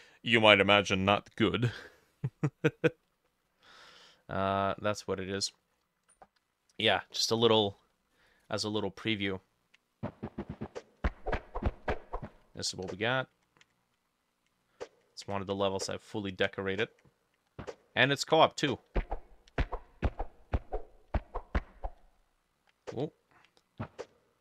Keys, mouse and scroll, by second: 2.8-8.0 drag, 2.8 middle click, 3.3 middle click, 3.8 middle click, 4.8 middle click, 4.9-5.2 scroll down 1, 5.6 middle click, 6.4 F5.